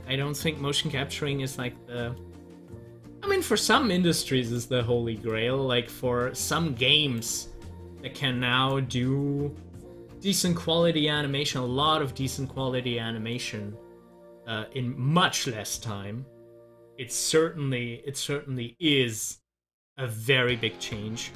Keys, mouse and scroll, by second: 0.9 Delete, 2.1 click, 2.9 Delete, 4.4 click, 4.7 Delete, 5.3-8.5 drag, 9.3 scroll down 1, 11.1 middle click, 11.8 scroll down 1, 12.4-15.9 middle drag, 18.8 click.